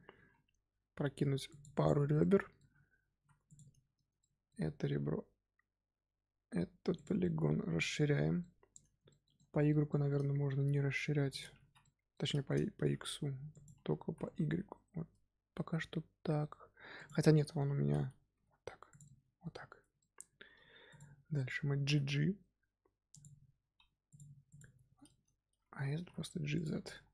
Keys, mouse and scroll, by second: 0.1 ctrl+r, 2.1 middle click, 3.1 3, 3.4 click, 4.1-4.8 middle drag, 4.8 s, 7.1-10.8 middle drag, 10.8 s, 11.8 middle click, 12.6 s, 13.8 s, 17.3-18.3 middle drag, 18.3 s, 19.0-20.4 middle drag, 20.4 2, 20.8 alt+click, 21.8 g, 24.0 alt+click, 24.4 alt+click, 25.0 middle click, 25.9 g, 26.8 Tab, 26.9 scroll down 2.